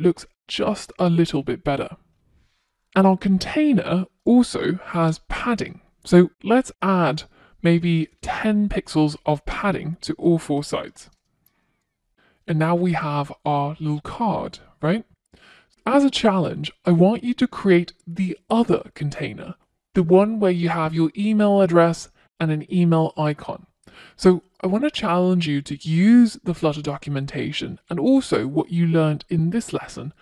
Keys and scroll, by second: 2.4 Return, 7.0 Return, 7.6 Return, 8.9 super+s.